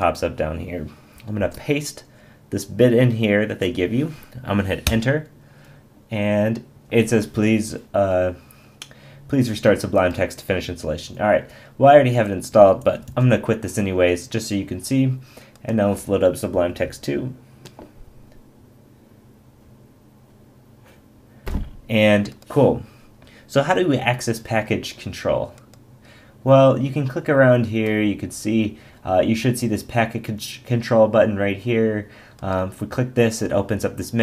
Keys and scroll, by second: 1.4 super+v, 4.8 Return, 12.2 ↺, 13.1 super+q.